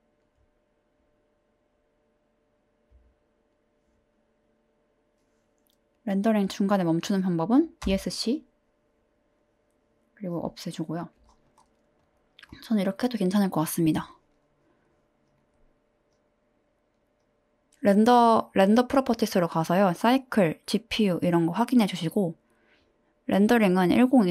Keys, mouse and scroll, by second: 10.7 click.